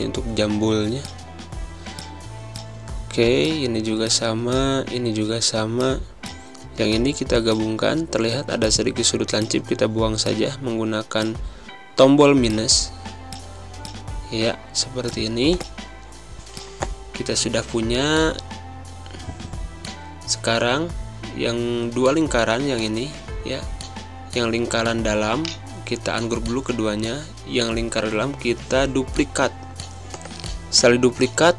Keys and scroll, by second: 0.2 v, 4.4 space, 6.7 z, 7.5 a, 8.7 -, 11.0 -, 11.7 z, 13.1 space, 14.9 space, 19.7 space, 21.0 v, 21.9 v, 22.4 space, 27.3 ctrl+c, 28.1 ctrl+f.